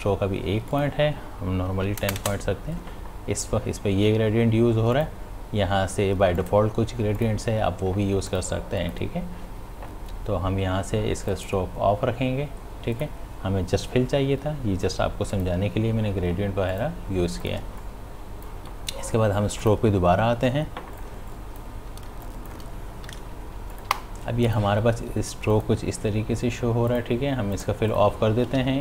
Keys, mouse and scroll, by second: 0.7 click, 1.7 Left, 4.9 click, 11.3 click, 15.3 click, 17.6 space, 17.8 click, 18.1 space, 19.6 click, 21.1 space, 21.4 click, 21.7 space, 22.3 click, 28.6 ctrl+z.